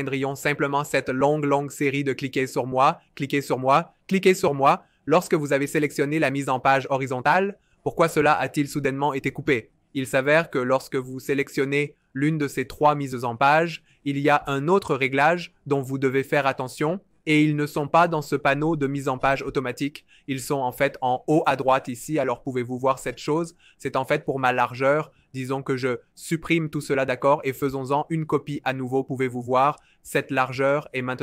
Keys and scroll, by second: 25.6 BackSpace.